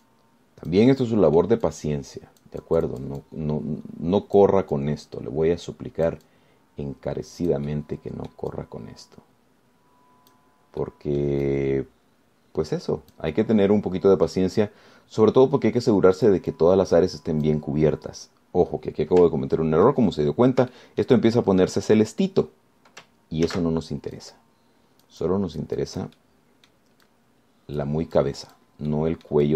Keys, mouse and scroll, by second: 0.3-2.8 drag, 5.6 click, 6.0-9.7 drag, 8.9 middle click, 12.0-15.7 drag, 14.6-15.7 middle drag, 15.8-17.7 drag, 21.4-21.8 ctrl+scroll up 3, 22.0 shift+click, 22.3 shift+scroll up 2, 22.5 shift+click, 24.7 ctrl+z, 25.4-27.4 drag, 27.4 middle click, 28.2-29.2 drag, 29.4 click.